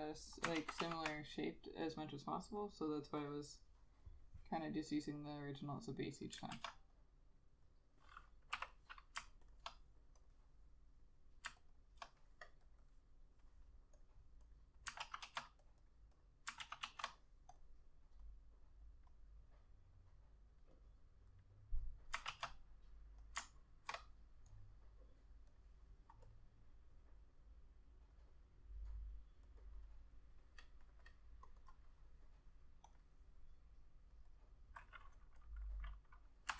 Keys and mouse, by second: 0.7 ctrl+z, 0.9 ctrl+z, 6.7 ctrl+z, 8.7 k, 9.6 ctrl+click, 11.7 ctrl+click, 11.9 ctrl+double click, 15.2 ctrl+z, 15.4 ctrl+z, 15.9 double click, 16.8 ctrl+z, 17.0 ctrl+z, 22.4 ctrl+z, 29.7 double click.